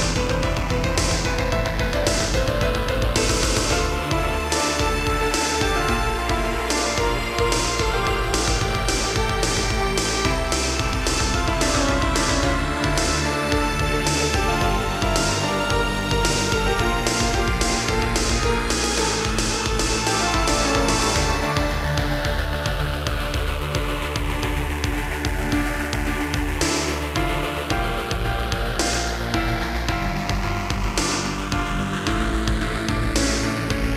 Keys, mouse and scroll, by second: 1.3 middle click, 3.0 shift+middle click, 4.7 click, 4.8 click, 5.7 shift+click, 7.7 b, 8.2 click, 11.0 shift+click, 12.2 7, 13.1 g, 15.8 click, 16.3 middle click, 17.6 scroll up 1, 18.1 middle click, 18.6 a, 19.4 click, 19.6 click, 20.9 click, 23.6 scroll down 1, 24.0 middle click, 25.1 Left, 25.5 Right, 26.6 Right, 31.0 g, 31.2 click, 32.4 Right.